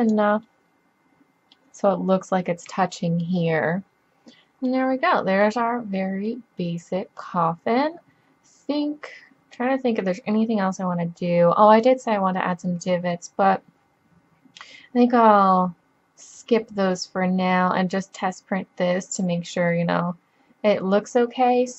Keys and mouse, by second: 2.5-4.8 middle drag, 8.1-9.9 middle drag, 11.0-19.5 middle drag.